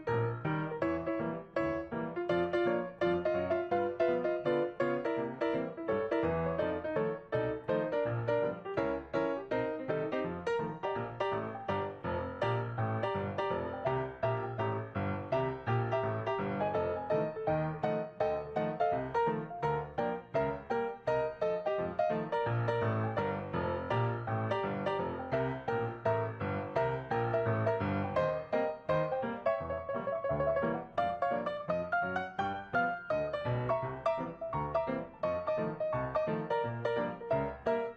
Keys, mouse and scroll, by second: 18.4 right click, 21.7 ctrl+d, 24.3 right click, 33.3 scroll down 3.